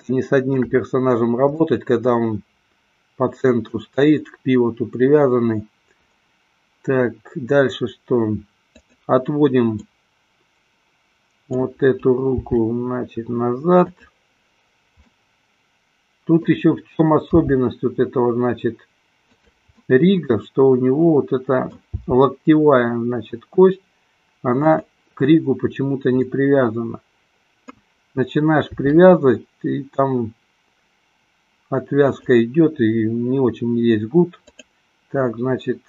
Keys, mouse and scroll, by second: 2.2-4.1 middle drag, 8.7-9.4 drag, 10.2-11.8 middle drag, 12.6 g, 14.2 click, 15.3-16.7 middle drag, 17.7 g, 20.1-22.2 middle drag, 22.4 g, 26.7-28.1 middle drag, 28.9 r, 32.4 click.